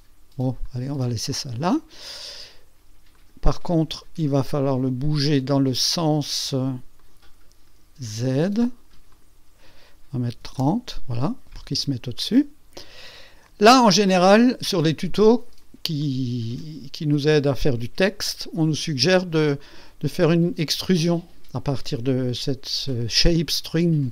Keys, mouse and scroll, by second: 0.6 click, 1.3 click, 3.1 click, 3.7 click, 5.8 click, 7.0 click, 7.4 click, 8.0 click, 9.1 click, 10.3 KP_3, 10.6 KP_0, 12.1 click, 13.9-15.7 drag, 16.0-17.6 drag, 19.6 click.